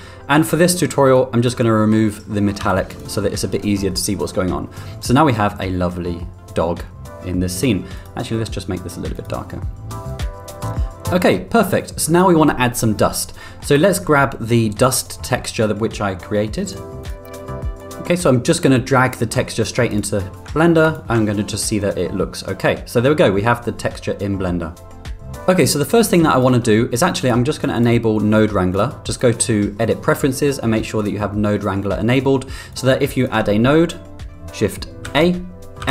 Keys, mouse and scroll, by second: 1.2 click, 2.8 z, 5.4-6.3 middle drag, 8.0 drag, 13.4 middle click, 13.8 click, 17.6 x, 19.9 click, 20.9 ctrl+click, 21.8-23.0 middle drag, 24.7-25.4 middle drag, 26.3 click, 27.3 click, 33.3 click, 35.0 shift+a.